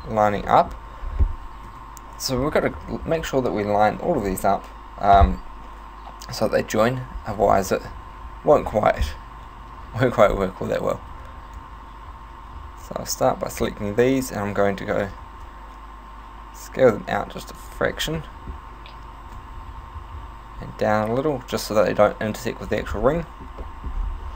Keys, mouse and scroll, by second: 0.5 middle click, 1.1 scroll down 2, 1.7 KP_7, 10.3-11.1 scroll down 3, 11.2 c, 13.7 right click, 14.9 s, 17.7 click, 18.2 middle click, 19.3 s, 22.8 click, 23.2 middle click, 23.6 middle click, 23.9-24.3 scroll up 6.